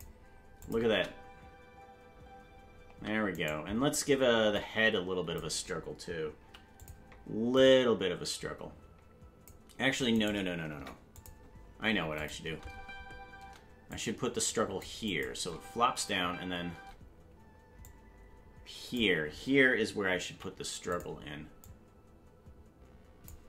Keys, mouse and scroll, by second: 0.6 click, 0.9 space, 3.4 right click, 3.4 space, 4.6-5.4 drag, 6.4 i, 7.6-9.5 drag, 10.3 right click, 10.7 Delete, 12.2 click, 12.4 space, 13.9-14.8 drag, 13.9 space, 15.1 click, 15.3 space, 17.2 space, 17.8-19.0 drag, 20.3 i, 21.6-23.3 drag.